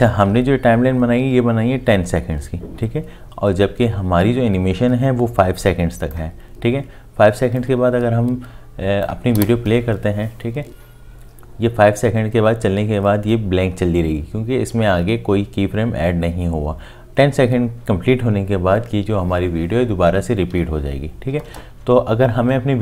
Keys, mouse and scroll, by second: 9.4 space, 21.5 space.